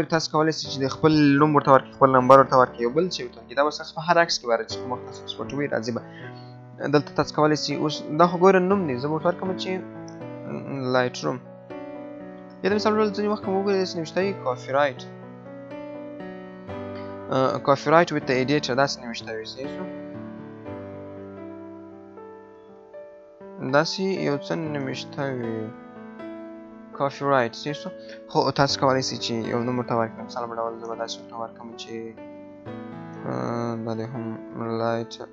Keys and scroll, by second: 10.6 BackSpace, 11.4 BackSpace, 14.3 BackSpace, 21.2 BackSpace, 27.5 BackSpace.